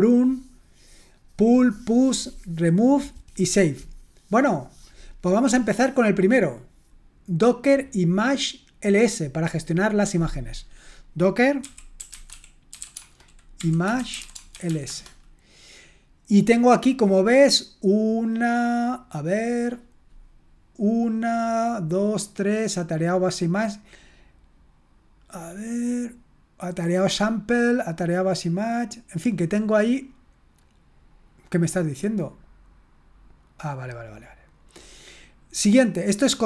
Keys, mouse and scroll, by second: 11.4-15.1 typing, 33.5-34.0 scroll up 1, 35.1-36.0 scroll up 1, 36.2-36.4 scroll down 1.